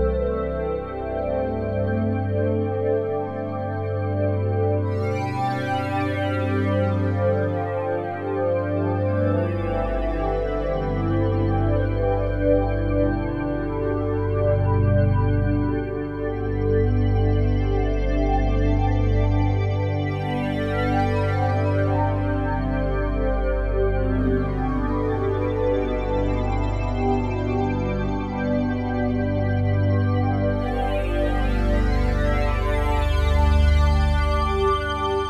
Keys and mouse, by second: 3.0 ctrl+p, 4.1 Return, 5.2 click, 5.6 click, 6.3 click, 6.7 shift+click, 7.4-11.4 alt+drag, 9.1 middle click, 11.4 ctrl+p, 12.3 Return, 13.3 click, 14.3 g, 14.6 z, 15.7 Escape, 16.2 click, 16.9 g, 17.2 z, 18.1 Escape, 18.7 alt+drag, 19.2-23.2 ctrl+alt+drag, 20.7 typing, 23.0-23.7 typing, 24.5 Up, 24.8 Return, 26.0 alt+click, 27.7-29.4 typing, 29.2 shift+drag, 30.1 click, 30.6 click, 31.6 r, 31.9 x, 32.0 x, 34.1 Escape, 34.6-35.2 alt+drag.